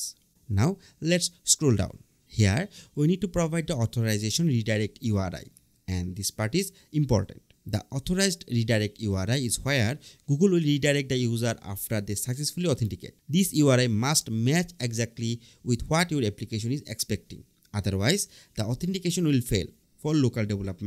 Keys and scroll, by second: 20.0 BackSpace.